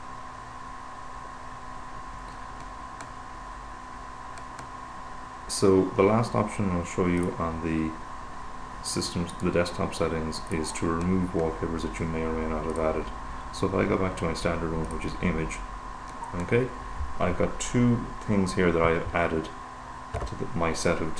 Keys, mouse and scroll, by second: 7.7 click, 9.7 right click, 10.8 click, 13.2 click, 15.3 click, 19.5 super+=.